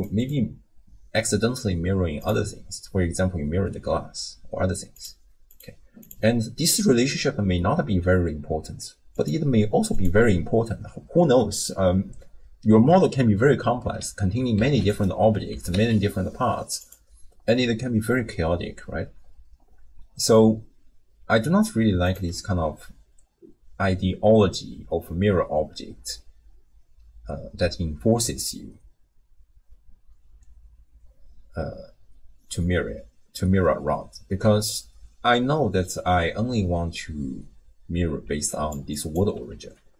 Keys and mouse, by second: 5.5 click, 6.1 click, 9.2 click, 9.9 click, 14.6 shift+d, 15.5 g, 22.1 click, 38.3 d, 38.5 click, 38.8 d, 38.9 click, 38.9-39.5 d.